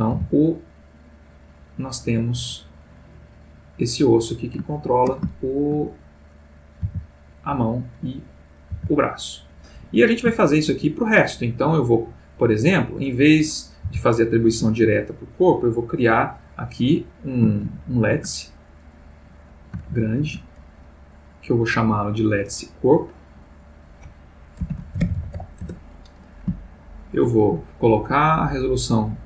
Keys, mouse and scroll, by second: 0.1 r, 4.2 click, 4.7 ctrl+middle click, 5.4 ctrl+shift+middle click, 6.4 click, 6.8 r, 7.5 Escape, 8.4 click, 8.8 r, 9.9 Escape, 10.3-10.9 shift+middle drag, 12.8 click, 13.8 r, 14.7 Escape, 16.4 click, 17.7 shift+a, 18.8 click, 19.4 click, 19.9 shift+a, 21.2 click, 23.0 click, 23.7 click, 24.7-25.3 typing, 25.6 shift+Return, 26.9 shift+middle click, 28.2 click.